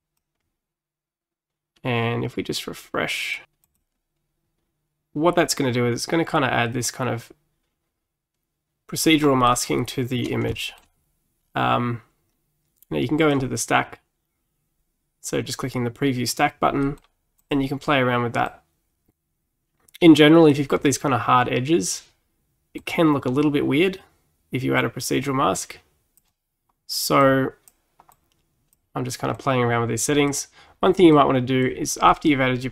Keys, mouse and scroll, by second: 3.7-6.7 drag, 9.5-13.3 middle drag, 13.3 click, 16.9 middle click, 17.4-18.5 drag, 22.8 click, 27.3 click, 28.2 click, 29.4 click, 31.2 click, 32.1-32.7 middle drag.